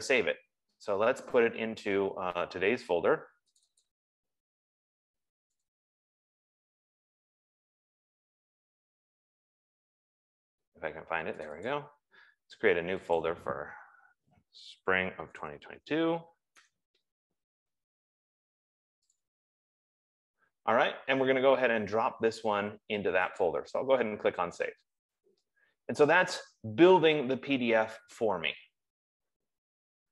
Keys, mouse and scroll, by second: 0.4 click, 4.2 click, 4.5 click, 5.9 click, 7.3-7.7 scroll down 1, 8.4 middle click, 10.8 scroll down 3, 11.9 click, 13.7 click, 15.0 typing, 16.6-17.3 typing, 19.6 click, 22.1 typing, 24.2 click.